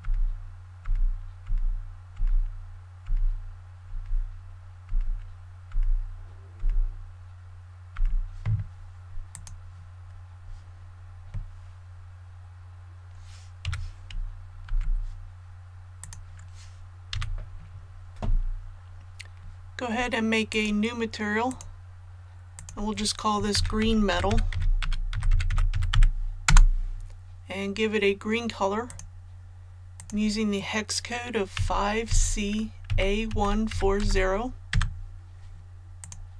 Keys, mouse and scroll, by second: 0.0-6.5 typing, 7.7-8.4 typing, 9.3 click, 13.6 a, 14.6 typing, 15.9 click, 17.1 a, 20.4-23.6 drag, 23.5-25.9 typing, 26.4 Return, 28.8 click, 31.5-33.9 typing, 36.0 click.